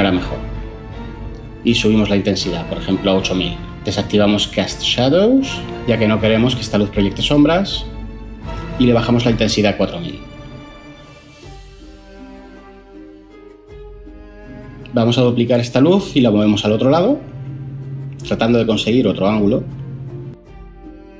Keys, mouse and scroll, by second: 2.4 BackSpace, 2.5 8, 2.7 Return, 7.7 BackSpace, 7.9 4, 8.0 Return, 15.5 shift+d, 16.6 x.